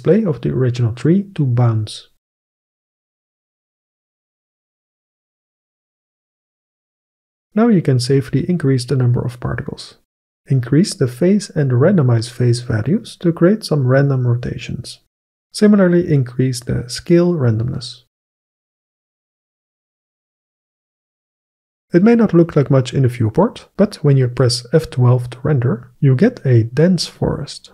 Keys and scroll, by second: 6.6 Return, 20.3 KP_8, 20.4 Return.